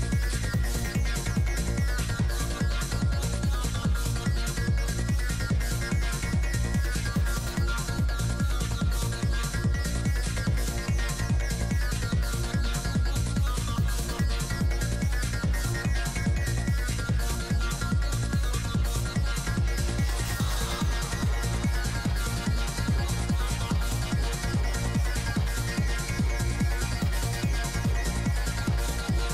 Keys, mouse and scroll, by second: 0.3 f, 0.6 click, 1.1-2.8 middle drag, 2.8 i, 3.0 f, 3.4 click, 6.2 click, 7.8 click, 8.5 right click, 8.6-11.8 typing, 9.4 click, 10.0 right click, 10.4 click, 11.5 click, 11.5 middle click, 11.9-16.3 drag, 16.3 middle click, 16.8 f, 17.0-22.6 drag, 17.6 f, 19.1-21.8 middle drag, 21.9 middle click, 22.5 shift+f, 23.1-24.6 drag, 24.7-25.9 drag, 25.1 middle click, 26.2 i, 26.4 f, 27.1-29.3 drag, 28.0-29.3 middle drag.